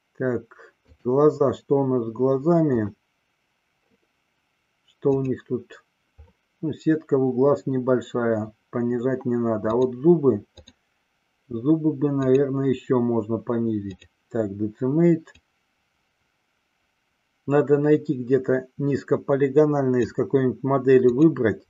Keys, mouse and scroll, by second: 2.7 click, 9.7 click, 10.7 click, 12.2-14.2 drag, 15.5-20.4 drag, 21.2-21.6 drag.